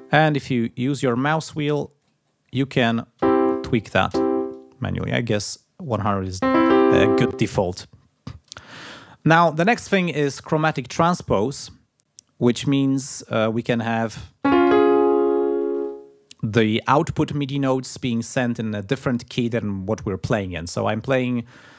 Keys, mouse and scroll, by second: 0.0-0.6 scroll down 2, 0.6-2.7 scroll up 4, 2.8 scroll up 2, 3.5-4.1 scroll up 2, 4.5-6.2 drag, 12.8 click.